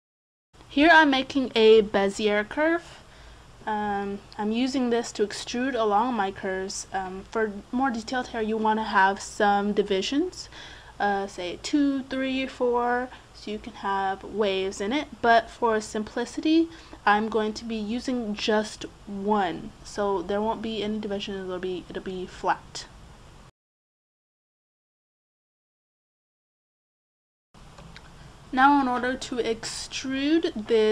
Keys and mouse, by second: 0.9 KP_Decimal, 4.2-5.7 middle drag, 8.7 Tab, 19.5 middle click, 20.6 Tab, 23.3-25.7 right drag, 24.0 click, 25.7 click, 26.0 middle click, 26.4 middle click, 26.6 right click, 27.0 middle click, 27.2-28.4 right drag, 28.4-30.9 middle drag.